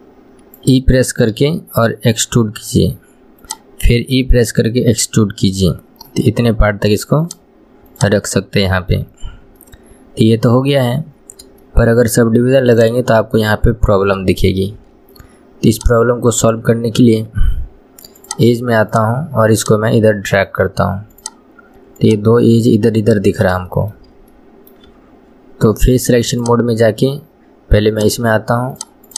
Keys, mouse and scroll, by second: 8.1 click, 8.4 middle click, 9.3 scroll up 1, 9.8-11.4 middle drag, 11.4-11.8 scroll up 1, 11.8-13.0 shift+middle drag, 13.0 click, 13.5-15.9 middle drag, 15.9 click, 18.4 click, 19.7 click, 21.3 click, 22.2 click, 23.0-26.5 middle drag, 26.5-28.2 drag, 28.9 click.